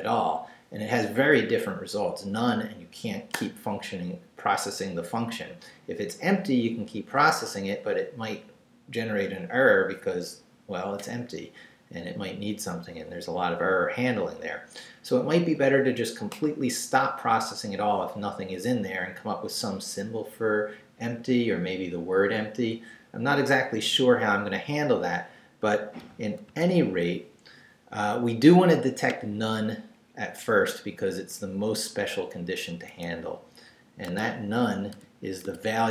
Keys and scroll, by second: 26.4 super+z, 29.9 Up, 32.9 Up, 34.1 Tab, 34.9 i, 35.4 Tab.